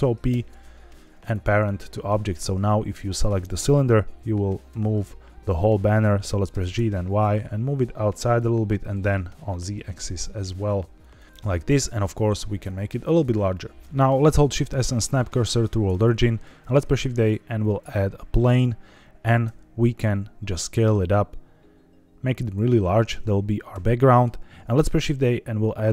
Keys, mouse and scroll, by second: 0.2 ctrl+p, 2.2 click, 2.8-3.2 middle drag, 4.6 g, 5.4 Escape, 6.4 g, 6.7 y, 8.2 click, 8.7 g, 8.9 z, 10.9 click, 11.2 middle click, 11.3 s, 12.4 click, 13.0 scroll down 1, 13.5 middle click, 13.8 shift+s, 14.5 shift+s, 15.9 scroll down 1, 16.5 shift+a, 19.4 s, 22.3-23.7 drag, 23.9 middle click, 24.7 shift+a.